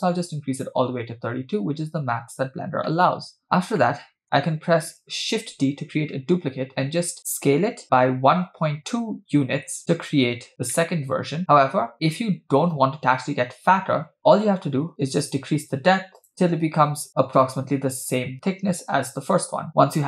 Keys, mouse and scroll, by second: 0.1 click, 1.3-1.7 scroll down 3, 2.9-3.4 middle drag, 3.7 scroll down 1, 3.8-4.2 middle drag, 5.4 shift+d, 10.8-11.4 middle drag, 11.9 KP_7, 12.0-12.7 scroll up 2, 15.3-17.1 drag, 18.8-19.6 scroll down 2, 19.7 middle click, 19.7-20.0 scroll down 3.